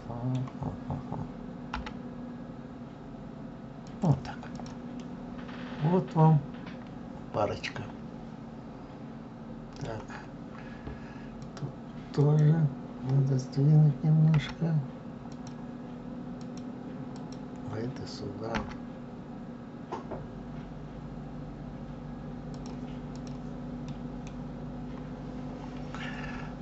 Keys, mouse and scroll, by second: 1.4 g, 4.2 click, 4.7-7.9 middle drag, 11.1 click, 11.9 click, 14.0 g, 16.1 click, 16.8 click, 18.2 g, 22.8 click, 23.6-24.0 middle drag, 24.0-24.4 scroll down 2, 24.4-24.8 scroll up 2, 24.8-25.7 scroll down 2, 26.3-26.6 scroll up 1.